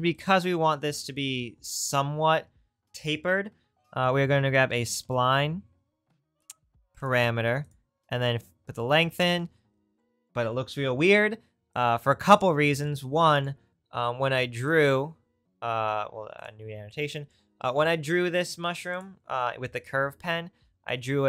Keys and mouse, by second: 7.6 click, 19.0-20.9 drag.